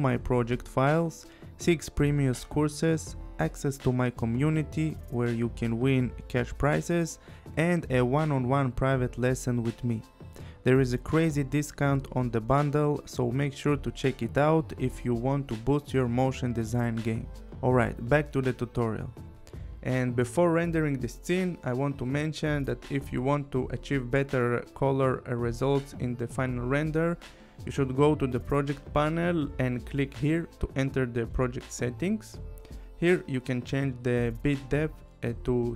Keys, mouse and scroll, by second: 28.4 click, 30.9 click, 33.1 click.